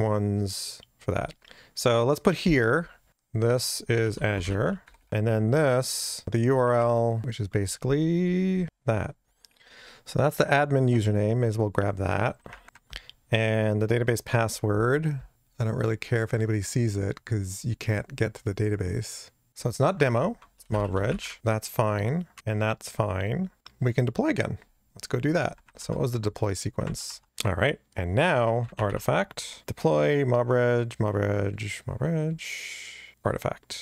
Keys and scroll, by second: 3.1 super+v, 12.6 super+v.